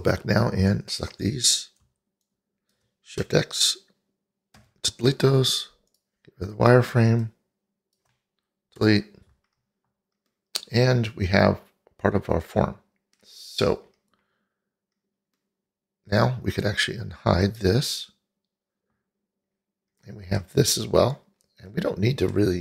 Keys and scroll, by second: 4.6 shift+x, 8.8 Delete.